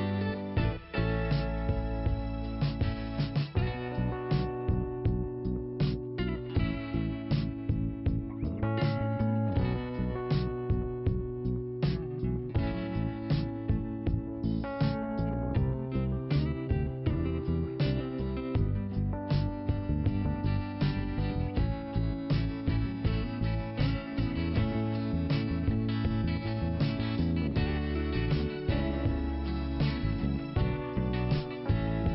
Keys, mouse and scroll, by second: 4.7 click, 6.4 click, 8.4 click, 10.0 click, 11.7 click, 15.7 click, 15.8 click, 16.5 click, 17.4 click, 19.7 middle click, 21.3 click, 26.0 click, 27.1 click, 28.4 click, 30.2 click, 31.5 click.